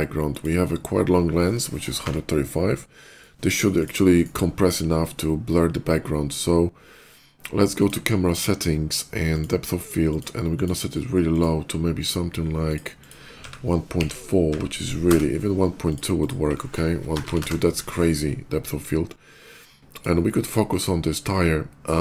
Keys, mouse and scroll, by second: 0.0 click, 1.9 Page_Down, 2.9 right click, 3.6 click, 4.0 right click, 7.6 click, 9.0 click, 9.8 click, 10.3 click, 11.1 click, 12.5 click, 12.6 click, 13.3 1, 13.8 ., 14.2 1, 14.3 4, 14.8 Return, 15.7 click, 16.0 click, 16.9 BackSpace, 17.0 2, 17.2 Return, 19.7 click, 20.5 click.